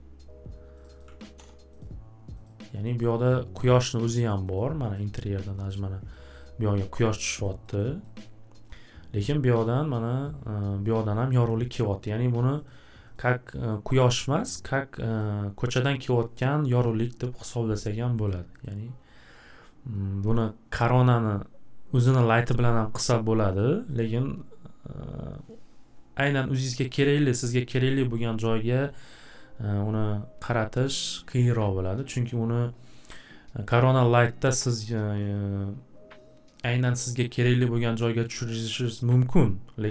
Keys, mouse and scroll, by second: 0.8 click, 1.0 click, 1.0 1, 1.4 Return, 1.8 click, 2.4 click, 2.8 click, 3.2 click, 3.7 click, 4.1 click, 4.5 click, 4.9 click, 6.4 scroll down 1, 7.0-7.4 scroll, 7.6 scroll down 2, 7.7 scroll, 8.0 scroll down 2, 8.2 scroll, 12.6 click, 13.1 click, 14.4 click, 15.2 click, 18.3 click, 18.6 click, 23.6 click, 24.0 click.